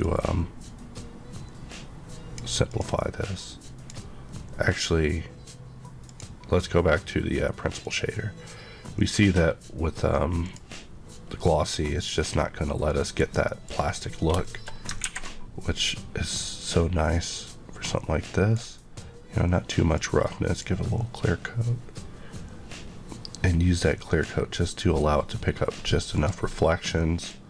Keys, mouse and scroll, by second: 2.6 click, 7.8 click, 12.8 middle click, 13.4 middle click, 13.6 scroll up 1, 14.4 middle click, 14.7 scroll up 1, 16.5 click, 19.9 click, 21.2 click, 26.1 click.